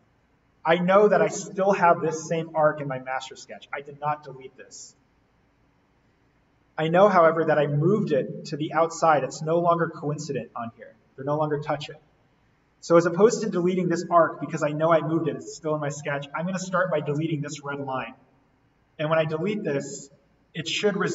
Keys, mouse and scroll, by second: 0.8 click, 4.9 click, 5.4-6.7 scroll down 1, 12.2-13.9 scroll up 1, 13.9 click, 15.9-17.0 scroll down 1, 17.0 click, 18.1-18.5 scroll up 1.